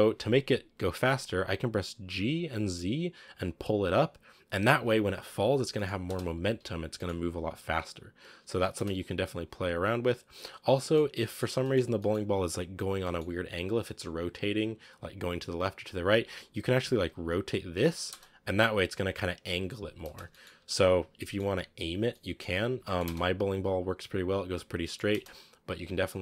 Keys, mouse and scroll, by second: 1.2-1.9 scroll down 1, 1.9 g, 5.6 middle click, 5.9 space, 6.4 a, 6.8-8.6 middle drag, 8.6 space, 8.9-10.6 drag, 10.6-13.3 middle drag, 13.3-14.2 scroll up 1, 15.8 right click, 16.0-16.6 scroll up 2, 16.6 r, 18.0 space, 19.9 space, 20.2 middle click, 20.5 ctrl+z, 21.0-22.5 middle drag, 22.5 a, 22.7 middle click, 22.9 space, 23.2 scroll down 3, 24.7 middle click, 25.0 space, 25.4-26.2 drag.